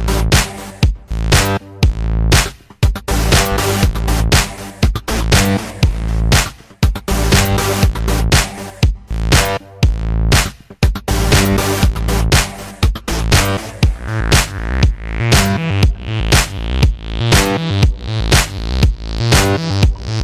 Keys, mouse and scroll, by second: 0.0 alt+right click, 0.2 alt+middle click, 0.8 alt+click, 1.2 alt+right click, 1.3 alt+middle click, 1.4 alt+click, 1.8 alt+middle click, 1.9 alt+click, 2.7 click, 2.9 ctrl+z, 3.1 click, 3.3 ctrl+z, 3.4 click, 3.9 ctrl+z, 4.0 right click, 4.4-6.0 drag, 6.0 alt+right click, 6.1 alt+click, 6.5 alt+middle click, 6.7 shift+c, 6.7 f, 6.9 click, 7.1 f, 7.2 alt+click, 7.8 ctrl+z, 7.9 alt+click, 8.4 ctrl+z, 8.5-10.7 drag, 10.7 f, 10.9-12.5 ctrl+drag, 12.5 alt+right click, 12.6 alt+click, 13.3 alt+middle click, 13.4 alt+click, 14.0-15.5 drag, 15.5 alt+right click, 15.7 alt+middle click, 16.1-18.1 drag, 18.1 alt+middle click, 18.3 alt+click, 18.6 alt+middle click, 18.7 alt+shift+click, 19.6 shift+c, 20.0 ctrl+click.